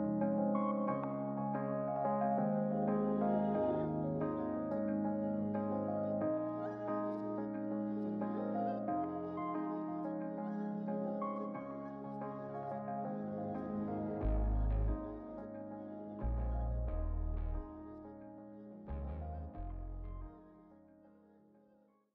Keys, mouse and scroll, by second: 3.2 click, 4.0 g, 6.0 click, 7.2 click, 10.4 click, 12.1 click, 12.7 r, 14.3 click, 15.5 click, 16.8 click, 17.5-17.8 middle drag, 18.0 scroll up 4, 18.7 scroll down 2, 19.0-21.6 middle drag.